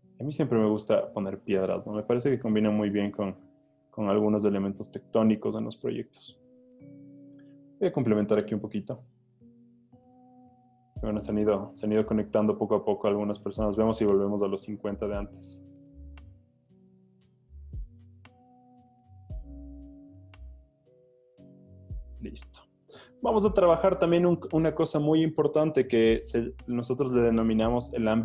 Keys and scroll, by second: 1.8 alt+BackSpace, 2.3 super+d, 2.6 z, 3.9 z, 6.9 b, 20.4 z, 21.9 z.